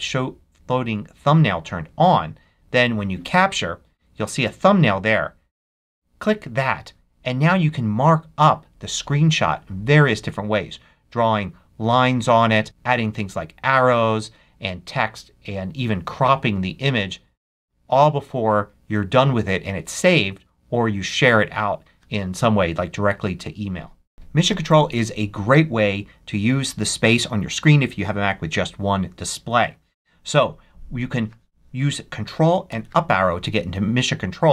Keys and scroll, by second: 32.6 ctrl+Up.